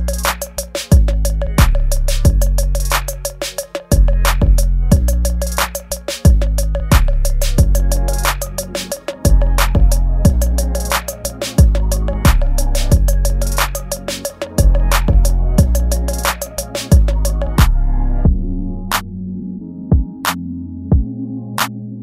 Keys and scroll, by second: 0.2 ctrl+z, 1.8 space, 2.6 space, 3.0 space, 4.7 space, 5.3 space, 6.2 space, 7.1 ctrl+z, 10.1 space, 11.2 space, 15.8 space, 21.7 ctrl+s.